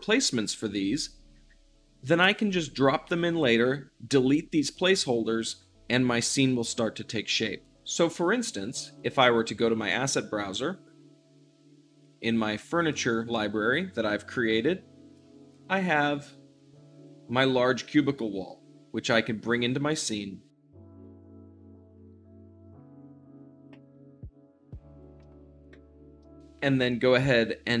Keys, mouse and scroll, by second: 8.1-20.8 drag, 20.8-23.2 typing, 21.0 shift+middle click, 21.7 click, 22.4 click, 23.0 shift+middle click, 23.5 click, 24.2 click, 24.3 scroll down 1, 24.5 shift+d, 24.6 middle click, 24.8 click, 25.3-27.8 drag.